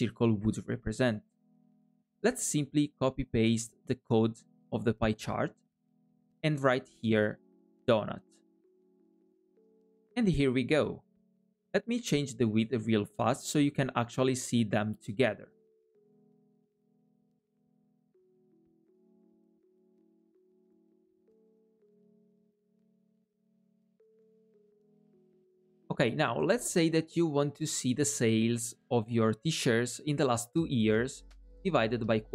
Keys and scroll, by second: 2.3 super+c, 5.3 super+v, 17.2 super+c, 18.8 super+v.